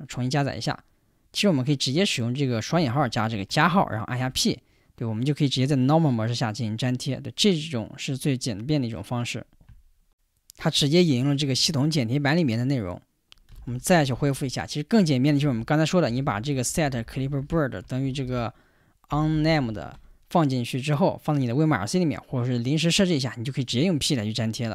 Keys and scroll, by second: 0.2 Return, 2.8 ", 4.2 p, 13.3-20.0 typing, 23.7 p.